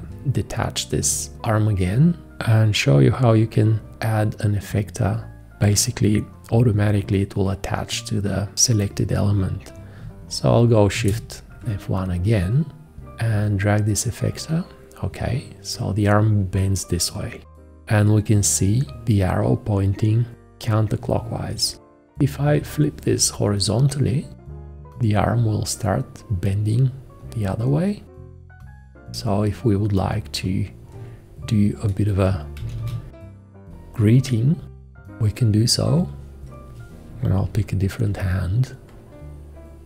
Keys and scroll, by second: 10.9 shift+F1, 22.4 h, 32.3-33.3 typing, 37.5 shift+..